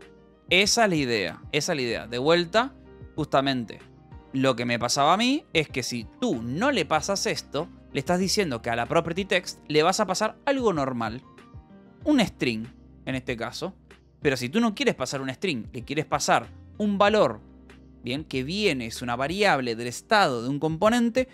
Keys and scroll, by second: 4.6 j, 5.0 l, 5.8 a, 6.1 BackSpace, 6.5 Right, 7.3-9.6 typing, 9.3 Escape, 13.0 v, 13.5 e, 13.8 Escape, 15.0 h, 16.6 v, 17.2 e.